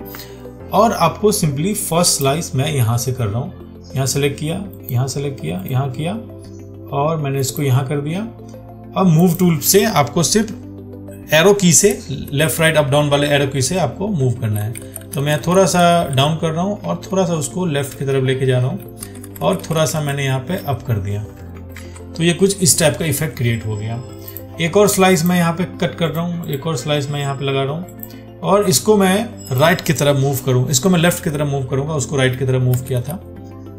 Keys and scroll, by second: 2.0 ctrl+1, 22.0 ctrl+d.